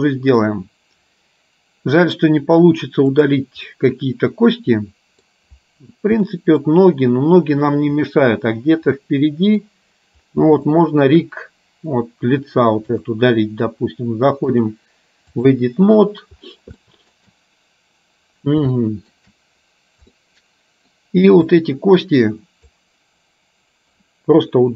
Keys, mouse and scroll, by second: 3.2 click, 3.8-5.3 middle drag, 6.3 middle click, 9.2 middle click, 10.8 shift+middle click, 13.1 click, 14.7-15.7 drag, 16.9 shift+middle click, 18.9 shift+middle click, 20.2 middle click, 21.6-22.8 drag.